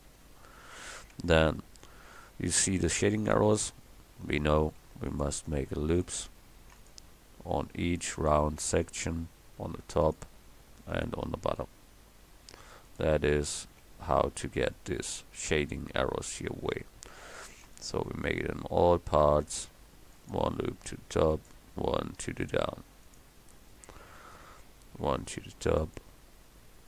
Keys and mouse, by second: 0.2 middle click, 4.6 ctrl+r, 6.5 ctrl+r, 8.6 ctrl+r, 10.6 ctrl+r, 14.7 middle click, 15.0-17.5 drag, 17.5 ctrl+r, 20.9 ctrl+r, 24.2-25.4 middle drag, 25.4 ctrl+r.